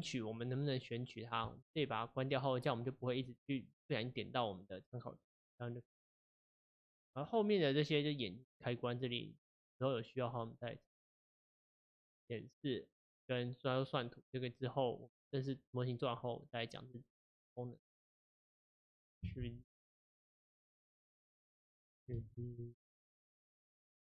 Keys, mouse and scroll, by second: 1.4 click, 2.7 click, 3.9-4.3 drag, 8.2 click, 8.6 click, 17.9 click, 18.3 click, 19.5 shift+g, 20.4 click, 20.6 click, 22.2 shift+d.